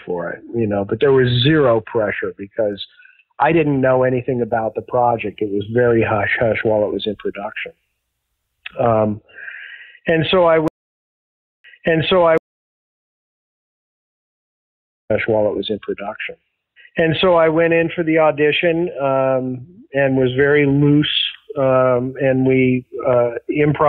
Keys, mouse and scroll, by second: 3.8-5.4 drag, 5.7 click, 6.5 click, 7.6 click, 9.3-10.6 drag, 10.6 space, 11.2 ctrl+shift+Delete, 11.6 space, 12.3 space, 12.5 click, 13.3 click, 14.9 click, 15.0 space, 15.8 ctrl+s, 22.0 click, 23.0-23.8 drag.